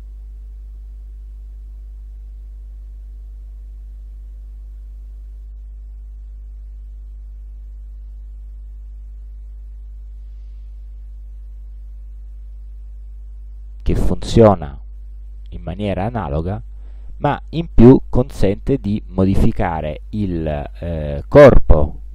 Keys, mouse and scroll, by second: 1.7 click, 4.7 click, 7.3 Escape, 9.2 click, 13.7-21.4 drag.